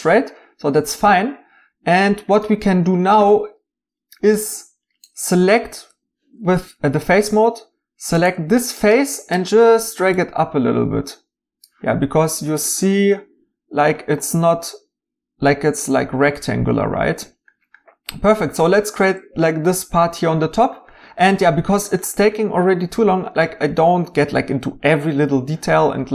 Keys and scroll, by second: 5.7 Tab.